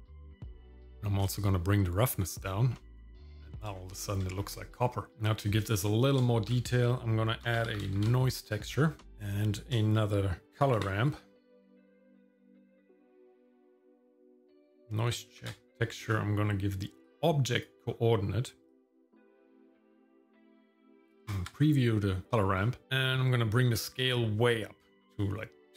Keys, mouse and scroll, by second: 1.2-3.0 drag, 3.4 scroll down 1, 3.8 shift+middle click, 4.5 scroll up 1, 5.1 middle click, 5.1 click, 5.7 middle click, 6.4 shift+a, 10.4-13.2 drag, 14.4 click, 15.4 ctrl+t, 17.0 click, 18.7-20.1 drag, 20.8 click, 22.3 middle click, 22.3-22.8 scroll up 3, 22.9-25.7 drag.